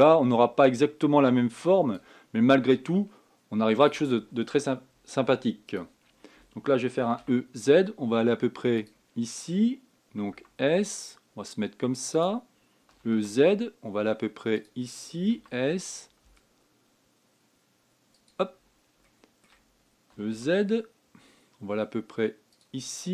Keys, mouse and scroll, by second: 3.5-7.7 ctrl+drag, 7.7 e, 11.0 s, 19.8-20.9 shift+middle drag, 20.9 e.